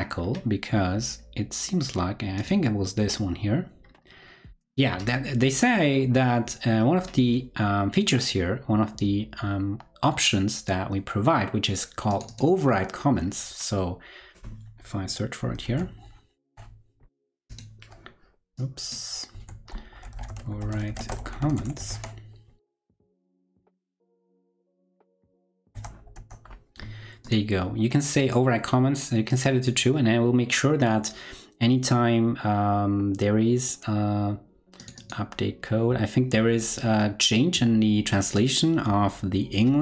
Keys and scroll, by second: 15.4 super+f, 15.6 super+v, 25.6 super+f, 25.7 super+Return.